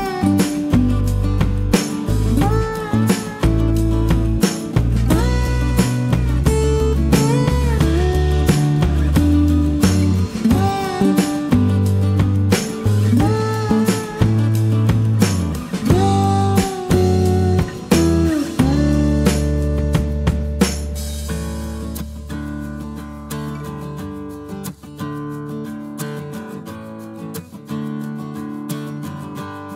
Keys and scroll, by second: 2.1 Return, 4.6 space, 5.7 Delete, 19.7 space, 19.8 Escape, 22.6 Delete.